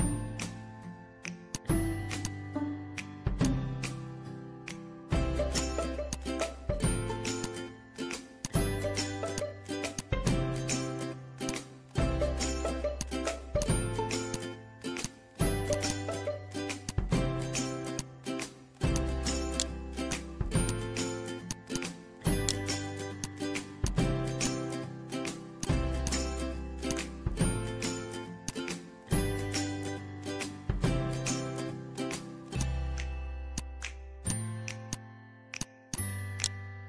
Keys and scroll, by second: 0.5 ctrl+a, 12.2 ctrl+z, 24.9 1, 25.0 3, 25.0 Return, 29.4 c.